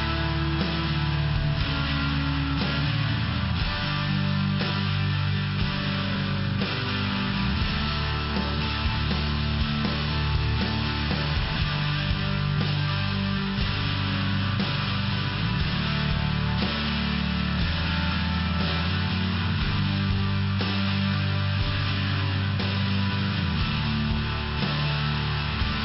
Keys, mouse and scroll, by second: 3.2 click, 3.3 click, 3.4 click, 5.2 click, 5.4 click, 7.9 click, 8.2 click, 8.5 click, 8.6 click, 8.7 click, 11.2 click, 11.5 click, 11.7 click, 12.6 click, 13.2 click, 13.6 click, 15.4 click, 19.9 click, 22.1 click, 22.3 click, 24.8 click, 24.9 click.